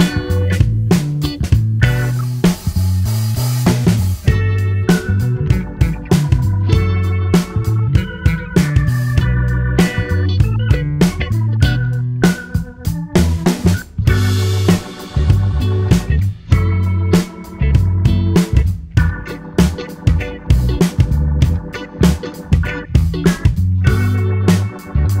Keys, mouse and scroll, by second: 4.4 click, 4.7-6.1 middle drag, 6.1 click, 6.6 middle click, 7.4 click, 8.0-9.6 middle drag, 9.9 click, 10.7-13.7 middle drag, 13.7 click, 14.2 middle click, 14.9 space, 16.4 space, 17.0 click, 17.4 space, 18.3 space, 19.4 middle click, 20.3 click, 20.7-22.2 middle drag, 22.2-23.1 scroll down 1, 23.1 click, 23.6-25.2 middle drag.